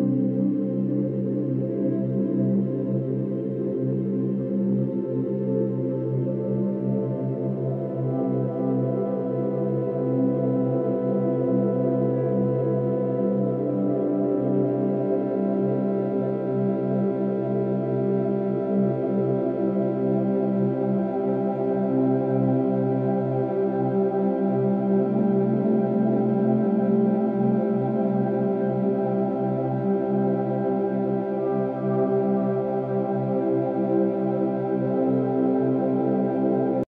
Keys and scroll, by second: 4.1 ctrl+-, 4.3 ctrl+=, 4.5 space, 21.7 ctrl+-, 22.4 ctrl+-, 26.8 ctrl+-, 26.9 ctrl+=, 27.1 space, 27.5 ctrl+=.